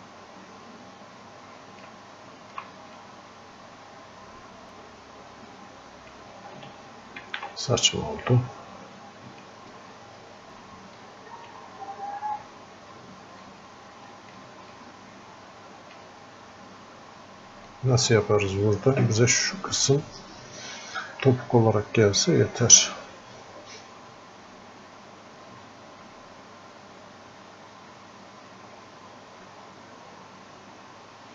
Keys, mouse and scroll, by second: 3.0-4.7 drag, 4.7-7.3 drag, 7.3 ctrl+z, 7.9-10.5 drag, 11.0-20.9 drag, 23.0-31.3 drag.